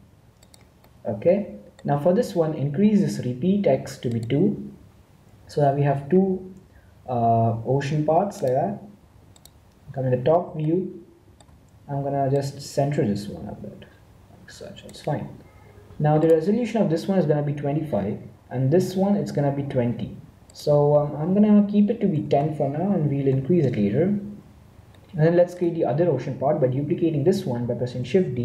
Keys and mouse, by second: 0.9-3.1 middle drag, 4.1-5.1 drag, 10.7-12.4 middle drag, 12.4-14.2 drag, 16.1-17.9 right drag, 18.8-20.4 right drag, 20.4-22.2 drag, 22.2 BackSpace, 24.9-28.0 middle drag, 28.0 shift+d.